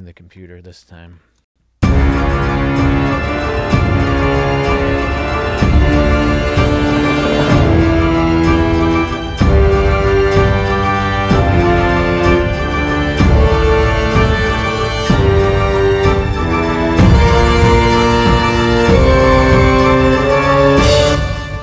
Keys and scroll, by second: 1.5 space, 21.1 space.